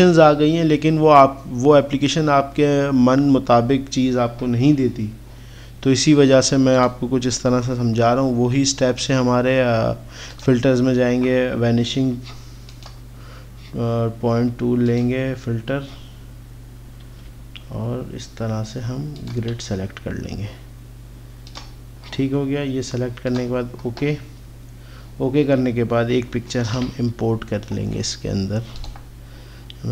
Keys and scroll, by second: 17.4 x, 26.8 ctrl+o.